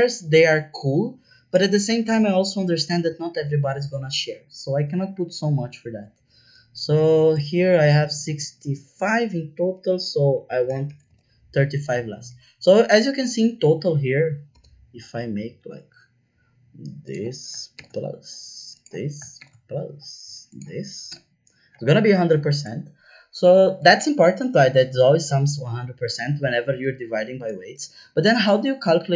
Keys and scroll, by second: 10.3 KP_3, 10.5 KP_5, 10.8 shift+5, 11.0 Return, 14.5 =, 21.0 Return.